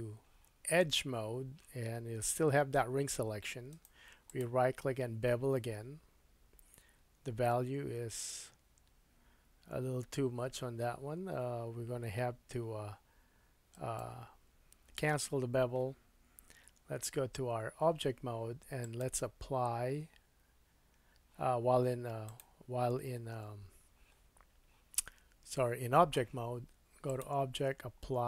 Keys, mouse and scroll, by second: 3.7 right click, 14.0-18.8 middle drag, 16.8 Tab, 18.8-22.4 drag, 22.4-27.1 middle drag, 27.1-28.2 drag.